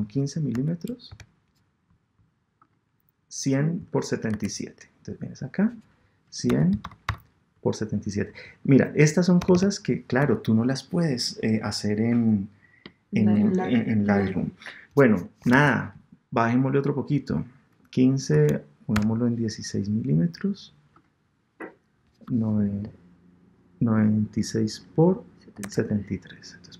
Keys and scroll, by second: 4.3 super+Tab, 15.6 super+Tab, 25.6 super+Tab.